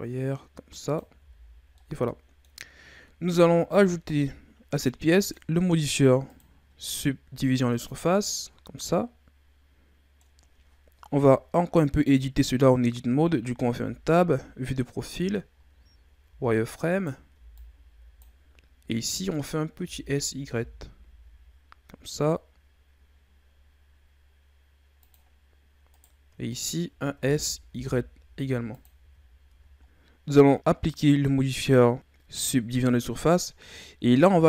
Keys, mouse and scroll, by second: 1.2 z, 1.4-1.8 scroll down 4, 1.8 middle click, 2.6-3.2 scroll up 2, 3.2 Tab, 5.2 click, 6.3-8.8 drag, 8.8-12.0 middle drag, 13.7 Tab, 14.2 KP_3, 15.6-16.2 shift+scroll up 2, 16.2 z, 17.0 right click, 17.3 b, 19.8 s, 25.9 right click, 26.5 shift+right click, 27.2 s, 29.0 z, 29.5 Tab, 29.8 middle click, 31.9-33.9 drag.